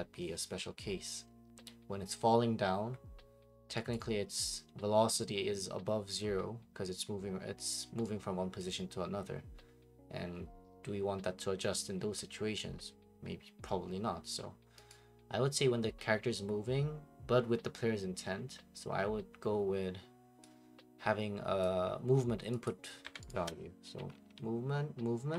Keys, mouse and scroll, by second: 0.0-25.3 typing, 3.9 right click, 6.0 middle click, 8.6 click, 14.9 right click, 21.6 click, 22.6 click, 23.0 Delete, 23.3 right click.